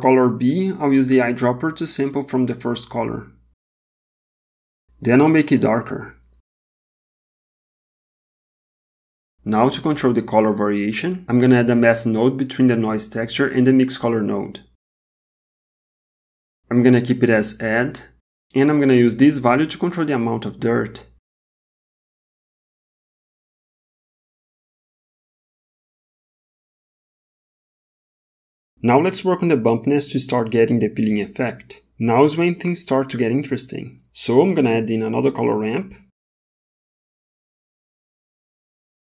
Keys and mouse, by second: 1.3 click, 4.5 click, 12.5 shift+a, 19.8-22.8 drag, 25.1-26.8 drag, 30.8 middle click, 31.6 middle click, 32.4 middle click, 33.0 middle click, 34.5 shift+a.